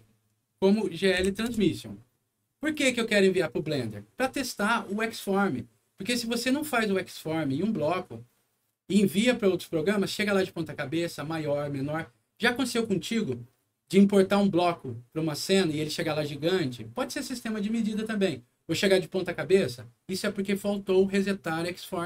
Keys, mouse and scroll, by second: 1.1 g, 1.5 Return, 2.6 click.